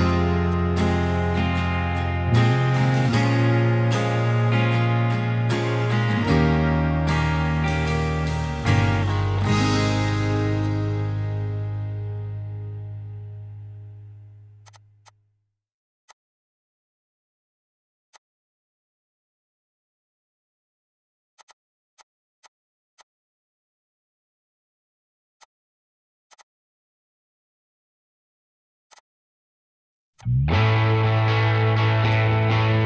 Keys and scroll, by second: 0.4 e, 0.8 Escape, 10.1 p, 10.8 Escape, 15.7-16.6 typing, 18.0-21.4 typing, 20.1 Escape, 23.0-23.9 typing, 24.9 Return, 25.4 [, 25.7 Escape, 26.2 p, 26.6 Escape, 31.1 m.